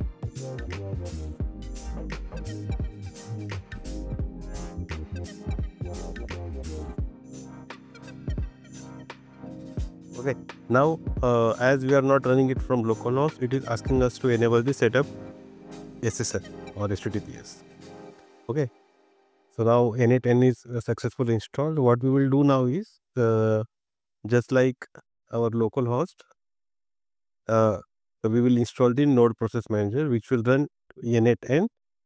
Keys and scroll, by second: 1.6 super+c, 3.0 super+v, 4.6 shift+;, 22.4 ctrl+c.